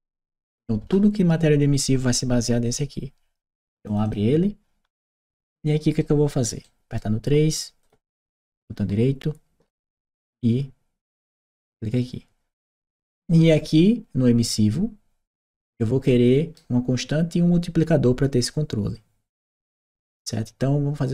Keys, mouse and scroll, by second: 3.6 click, 3.8 click, 5.3-6.8 right drag, 7.6 click, 9.5-10.9 drag, 12.5 click, 13.1 right click, 15.9 right click, 19.8-21.1 right drag.